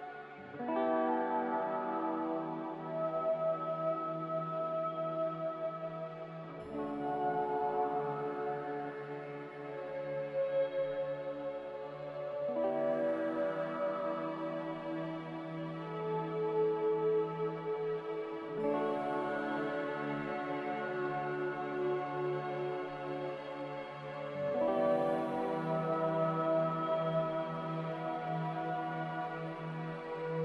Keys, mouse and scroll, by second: 10.8 3, 10.9 Return, 17.0 2, 17.2 Return, 29.5 2, 29.6 Return.